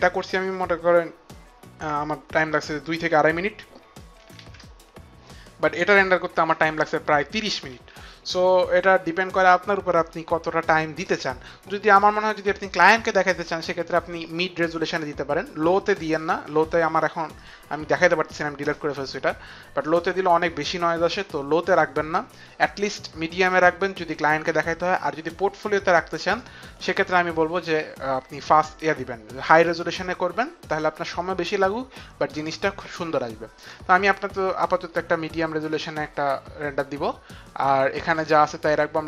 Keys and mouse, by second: 0.7 click, 4.6 ctrl+KP_0, 4.6 click, 6.0 click, 7.9 ctrl+KP_0, 17.5 click, 22.4 click, 23.5 click, 26.9 click, 35.8 click, 38.2 click.